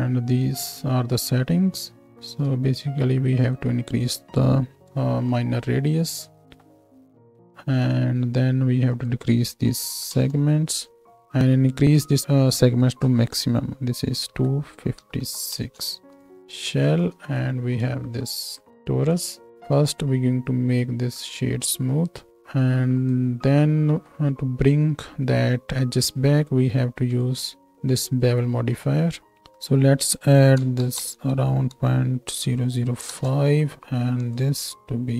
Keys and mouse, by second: 0.5-16.2 drag, 0.5 right click, 6.4 z, 16.0 ctrl+space, 16.2-19.7 middle drag, 17.2 z, 19.7-27.1 drag, 23.9 z, 27.0-27.7 middle drag, 27.0 right click, 27.7-35.1 drag.